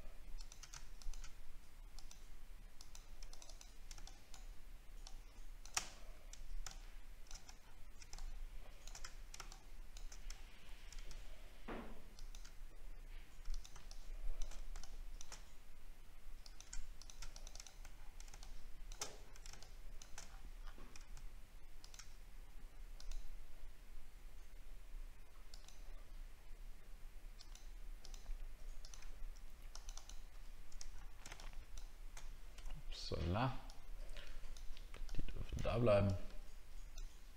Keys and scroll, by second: 7.5 alt+scroll down 2, 9.1 alt+scroll down 3, 10.1 alt+scroll down 1, 10.3 alt+scroll up 3, 17.9 alt+scroll down 1, 19.1 alt+scroll down 2, 19.7 alt+scroll down 5, 20.3 alt+scroll up 2, 30.8 alt+scroll down 1.